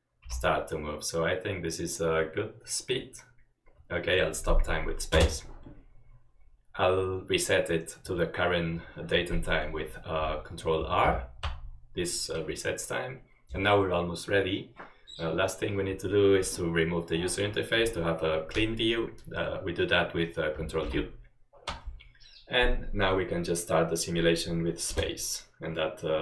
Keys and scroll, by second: 0.5 typing, 5.2 space, 11.2 ctrl+r, 21.0 ctrl+u, 25.0 space.